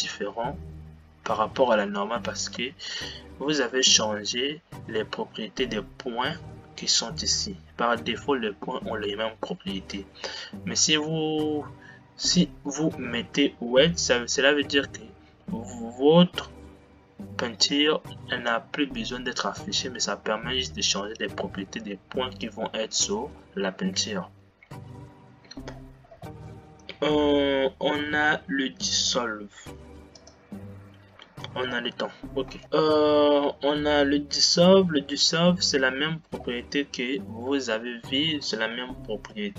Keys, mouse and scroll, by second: 4.4 Tab, 24.5 Tab, 25.9-26.4 scroll down 8, 32.6 space.